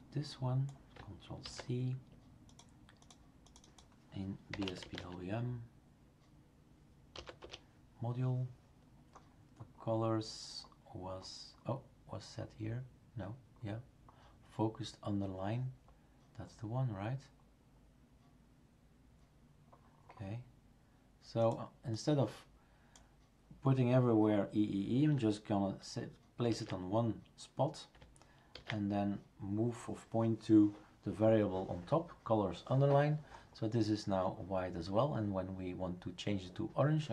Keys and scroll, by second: 1.4 ctrl+c, 4.3-5.4 typing, 7.1 typing, 7.4 Return, 26.5 ctrl+v, 28.5 ctrl+s.